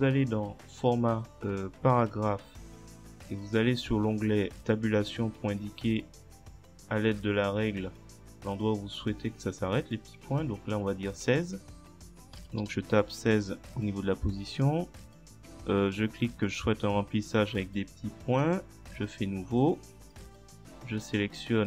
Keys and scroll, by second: 12.2-13.1 typing.